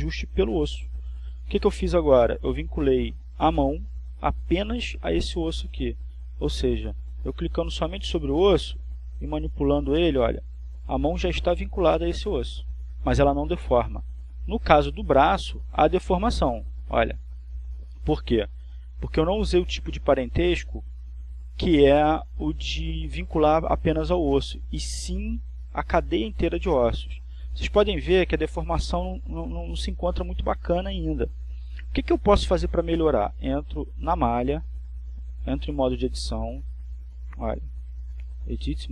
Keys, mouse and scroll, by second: 5.6 click, 11.3-12.6 right drag, 12.6 right click, 13.6 r, 18.8 click, 19.7 right click, 20.6 r, 33.4 click, 34.3-35.6 shift+middle drag, 38.3 right click.